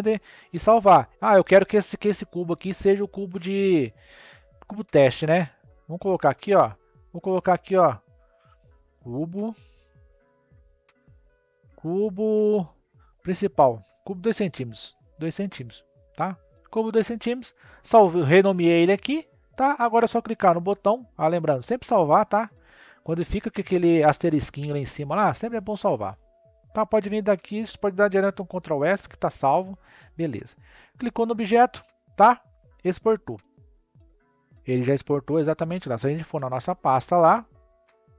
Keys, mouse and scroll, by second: 1.9-2.5 scroll down 2, 2.9-5.9 middle drag, 6.4 click, 7.1 click, 7.2-10.4 drag, 21.8-24.9 drag, 25.6-26.7 drag, 28.3 ctrl+s, 30.2 click, 33.5-36.4 drag.